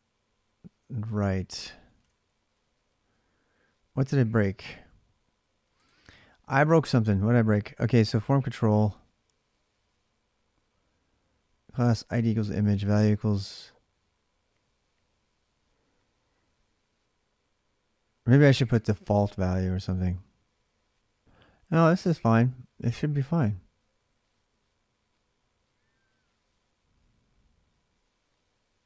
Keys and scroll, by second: 0.8 alt+Tab, 1.8 alt+Tab.